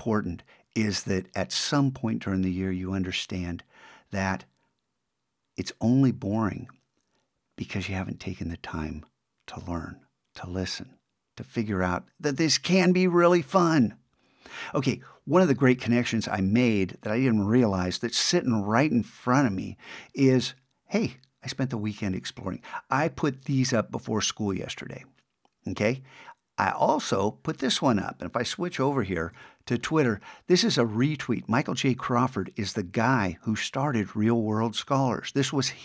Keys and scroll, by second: 29.3 super+`.